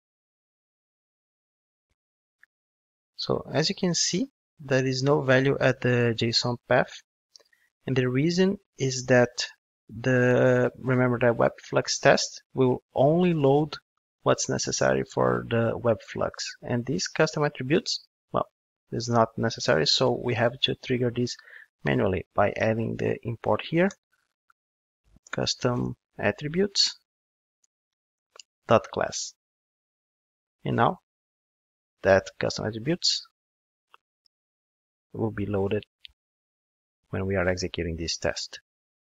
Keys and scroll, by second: 15.5 super+1, 21.8 ctrl+Tab, 27.6 Return, 34.3 ctrl+shift+d.